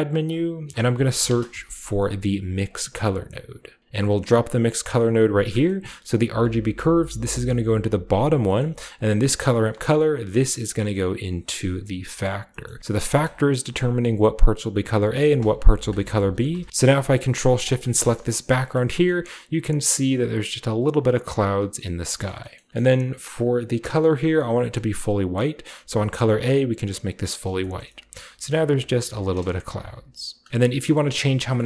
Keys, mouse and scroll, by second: 0.1 drag, 0.6-1.4 typing, 1.1 click, 2.5-3.8 drag, 5.0 click, 6.2 click, 7.4-8.2 drag, 8.9 drag, 9.3 click, 9.5 click, 10.3-12.2 drag, 12.6-13.0 scroll up 1, 13.0 click, 13.5 scroll up 1, 15.6 click, 17.6 ctrl+shift+click, 18.1 click, 18.9 scroll down 1, 20.3-20.6 scroll down 1, 21.7-23.0 scroll down 1, 23.0-24.2 scroll up 1, 23.4 click, 25.9 click, 26.8 click, 27.4-27.8 scroll down 1, 27.7-29.0 shift+middle drag, 28.5-28.8 scroll down 2, 29.1-29.9 typing, 30.2 scroll up 1, 30.7-31.5 scroll down 3.